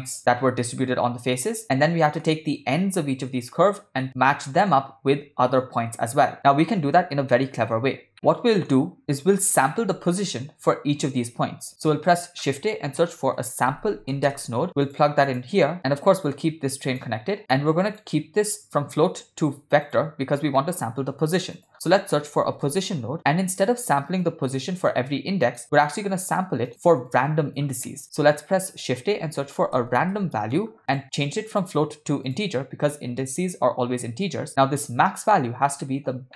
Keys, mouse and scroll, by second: 1.8-2.3 ctrl+middle drag, 4.1 ctrl+middle click, 4.5-4.8 shift+middle drag, 7.4 middle click, 8.3 ctrl+middle click, 11.8 shift+a, 14.6 BackSpace, 15.8 ctrl+middle click, 15.8-16.2 scroll down 1, 16.2-17.1 drag, 17.4 middle click, 17.9-20.0 drag, 20.6 middle click, 21.0 shift+a, 24.9-25.6 drag, 25.7-26.7 drag, 27.1-27.7 drag, 27.9 middle click, 28.0 shift+a, 31.5-32.4 drag, 32.9-33.6 drag, 35.9 ctrl+middle click, 36.3 middle click.